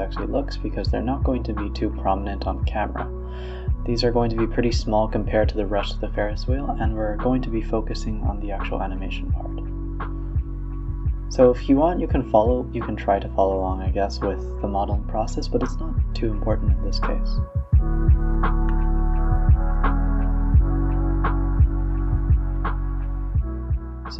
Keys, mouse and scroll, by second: 0.6 g, 1.7 middle click, 2.2 e, 2.7 middle click, 3.5 scroll up 1, 3.8 click, 5.3 click, 5.4 x, 5.7 middle click, 6.1 click, 6.2 x, 6.8 click, 7.4 click, 7.5 click, 8.0 shift+click, 8.5 ctrl+e, 9.2-10.0 middle drag, 10.0 click, 10.6 click, 11.0 e, 11.5 g, 12.1 e, 13.1 middle drag, 13.3 g, 14.0 Tab, 14.2-14.6 middle drag, 14.6 Tab, 14.8-15.8 middle drag, 15.8 click, 16.3 click, 16.6 click, 17.0 shift+click, 17.5 KP_7, 18.2 g, 18.9 s, 19.6 g, 20.3 middle click, 20.7 a, 20.8 a, 21.0 middle click, 22.0 Tab, 22.2 middle click, 23.2-24.1 drag.